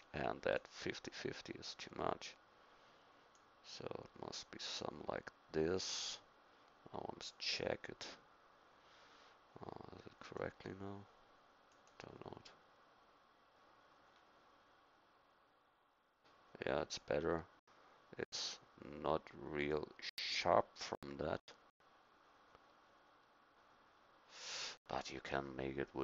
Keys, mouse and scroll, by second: 14.1 middle click.